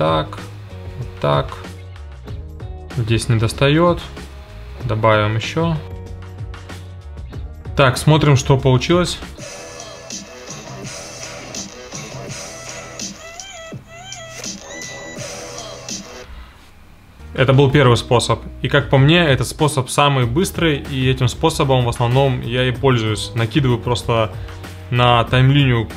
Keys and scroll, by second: 4.2 i, 5.6-7.5 typing, 9.3 space, 16.2 space.